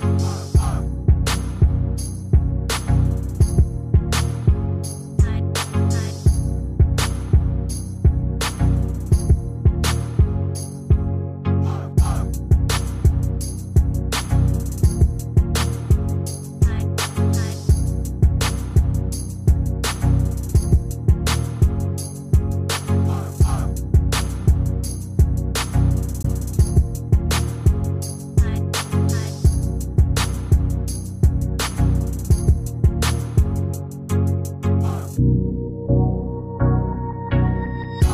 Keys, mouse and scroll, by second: 4.9-5.7 typing, 22.8-23.5 typing, 29.4-30.1 typing, 37.8 shift+click.